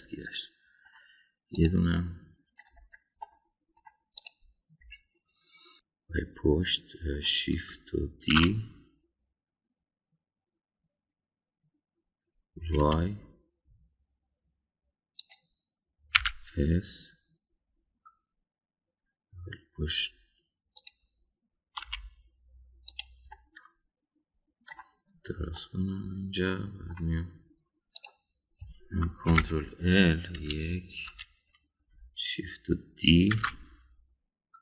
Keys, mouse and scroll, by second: 0.3-1.9 middle drag, 2.5 click, 4.2 middle click, 5.9-8.2 middle drag, 9.3 shift+d, 17.1 s, 22.8 e, 24.3-25.7 middle drag, 26.5-27.9 middle drag, 29.0 click, 30.3 ctrl+l, 31.4 KP_1, 32.0 KP_3, 34.3 shift+d.